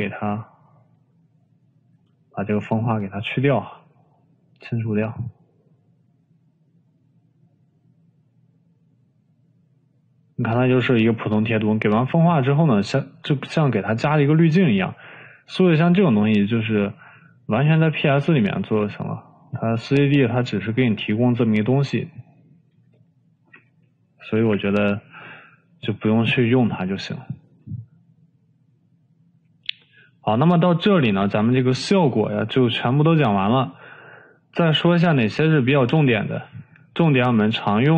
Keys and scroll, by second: 25.3 Delete.